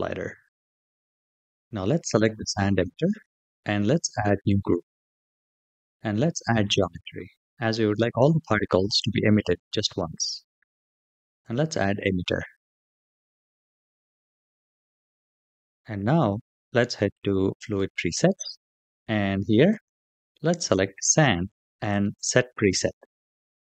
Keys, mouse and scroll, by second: 2.0 click, 4.5-6.6 drag, 11.2 click, 13.3-14.6 middle drag, 17.4 click, 19.5-20.6 drag, 21.7 click.